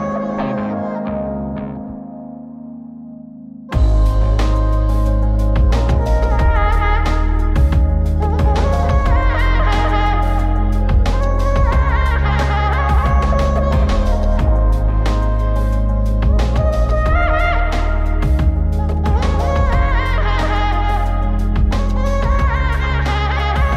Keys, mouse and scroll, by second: 3.0 click, 9.7 click, 13.6 click, 18.4 click.